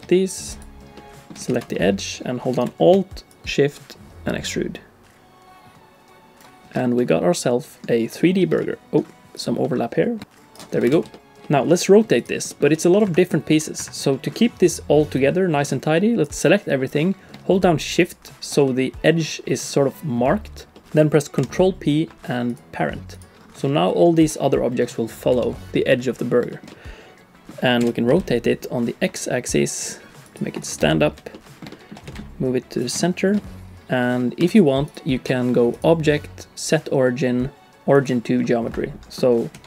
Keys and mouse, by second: 0.9 shift+click, 1.5 alt+z, 1.7 click, 3.4-6.4 drag, 7.0 middle click, 8.6 middle click, 9.3 click, 9.6 middle click, 10.9 alt+a, 11.1 click, 11.4 click, 12.5 click, 12.7 r, 13.5 r, 14.1 click, 15.3 click, 18.1 shift+click, 18.7 middle click, 20.7 middle click, 21.4 ctrl+p, 23.1 click, 23.6 middle click, 23.8 click, 24.2 r, 25.3 r, 26.5 shift+click, 26.7 click, 27.8 r, 30.9 shift+click, 31.3 middle click, 31.5 click, 31.7 shift+click, 32.0 g, 33.0 shift+click, 33.4 click, 33.4 middle click, 33.6 click, 33.7 g, 34.5 alt+a, 34.8 click, 35.7-38.4 drag, 38.7 middle click, 39.2 middle click, 39.5 r.